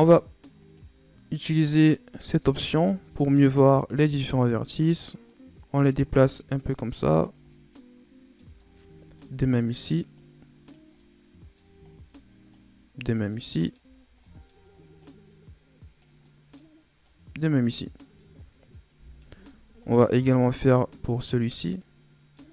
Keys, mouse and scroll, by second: 0.5 click, 2.2 click, 2.8 scroll down 2, 3.0 middle click, 3.4-3.9 scroll up 1, 3.9 right click, 6.5 right click, 7.4-8.6 middle drag, 8.6 scroll down 1, 9.1 right click, 10.1 right click, 10.9 middle click, 11.8-12.4 scroll down 2, 12.4 right click, 13.2 middle click, 13.9 scroll down 5, 14.1 middle click, 14.9 right click, 16.2 middle click, 17.0 right click, 17.8 scroll down 1, 18.1-19.4 middle drag, 19.4 scroll down 3, 19.6-20.3 scroll up 3, 20.3 right click, 21.3-21.6 scroll down 2, 21.6 middle click.